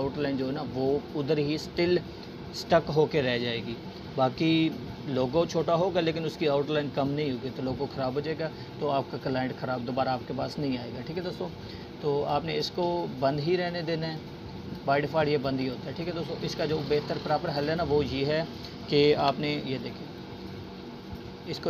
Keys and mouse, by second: 5.6 click, 13.7 Delete, 14.3-14.9 drag, 20.2-21.6 drag.